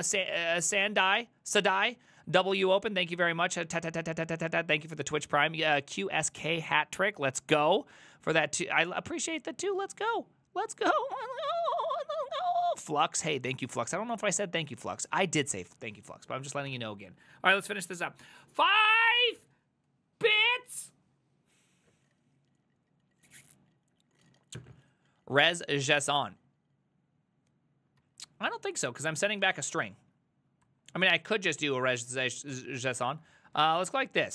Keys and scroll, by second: 16.8 alt+f, 28.1 alt+{, 29.4 ctrl+a, 30.0 ctrl+c, 30.7 ctrl+t, 30.7 typing, 32.0 ctrl+h, 32.3-34.3 typing.